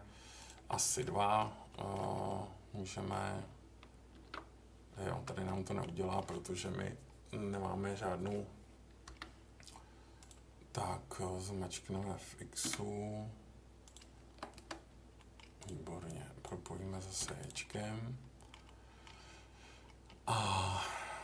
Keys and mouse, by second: 0.5 Escape, 0.9 click, 1.1 middle click, 1.7 middle click, 2.2 middle click, 4.1 ctrl+r, 5.5 middle click, 5.8 middle click, 6.6-8.2 middle drag, 9.0 k, 15.2 middle click, 16.1 click, 17.2 j, 17.8 middle click, 18.6 middle click.